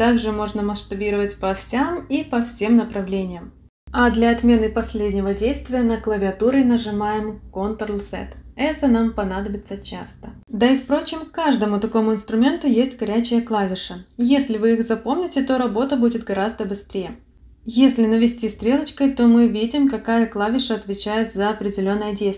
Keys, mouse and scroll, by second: 0.9 click, 2.8 click, 3.8 click, 5.7-6.2 ctrl+z, 6.5 ctrl+z, 6.7 ctrl+z, 20.3 click, 21.3 click.